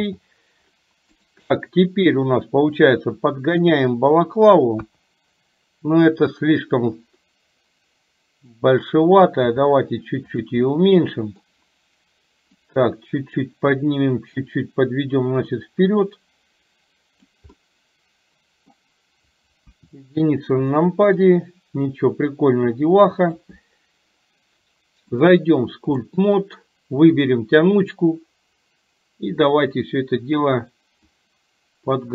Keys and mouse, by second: 0.0 n, 2.8-4.5 drag, 4.8 KP_1, 6.8-8.7 drag, 10.6 middle click, 12.8 click, 14.6-17.5 drag, 17.6-18.7 middle drag, 19.7 KP_1, 20.8 shift+middle click, 21.8 click, 22.2-23.6 drag, 25.1-26.5 drag, 29.8-30.8 drag, 31.2-32.1 drag.